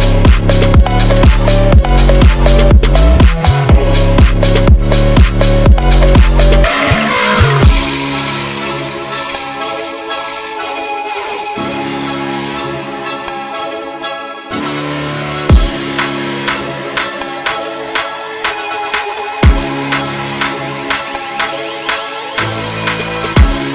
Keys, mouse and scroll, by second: 1.4 g, 2.0 g, 2.9 shift+d, 3.5 shift+d, 5.4 scroll down 1, 5.7 click, 5.9-6.4 scroll up 4, 6.4 scroll down 2, 6.6 click, 7.1 scroll down 1, 7.3 click, 7.3-7.9 scroll up 2, 8.1-10.4 typing, 8.5 scroll down 3, 8.7 click, 10.2 click, 11.3 Tab, 11.4 click, 11.6 3, 11.7 click, 11.8 scroll up 3, 12.0 i, 12.3 e, 13.1 i, 13.8-14.9 right drag, 15.2 click, 15.4 e, 16.3 click, 16.9 g, 17.4 scroll down 5, 17.6 g, 18.0 click, 18.9-22.1 typing, 19.7 click, 23.1 ctrl+z, 23.2-23.7 typing.